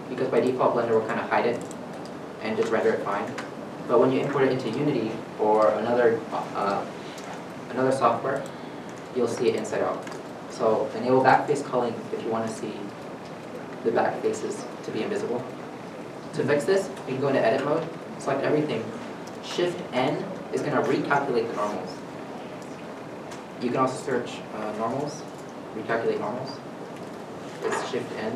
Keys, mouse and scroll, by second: 0.2 middle click, 14.8 middle click, 17.0 Tab, 18.1 a, 20.1 shift+n, 22.8-28.3 ctrl+drag, 22.9 ctrl+z, 23.4 space, 24.8-25.3 typing, 25.9 Down.